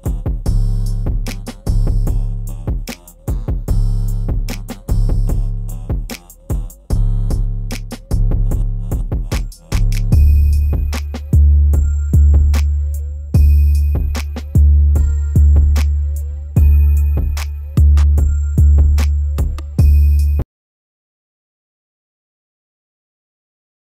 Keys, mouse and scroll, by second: 1.1-3.0 drag, 3.0 right click, 3.7-4.5 scroll down 1, 4.5-6.2 drag, 6.2 right click, 6.9 click, 7.7-8.3 scroll up 1, 9.6-16.7 drag, 17.5 F9.